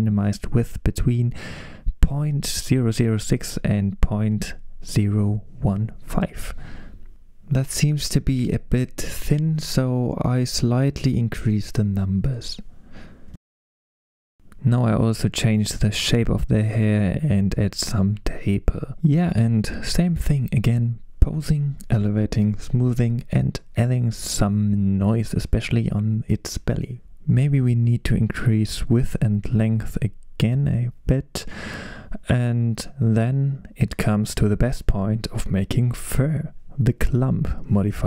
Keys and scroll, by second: 8.4-9.8 typing, 12.1 BackSpace, 12.1 BackSpace, 12.3 BackSpace, 12.6 8, 12.8 Return, 26.0 super+z, 26.0 super+z, 28.8-29.6 typing, 34.0 super+s, 34.0 typing.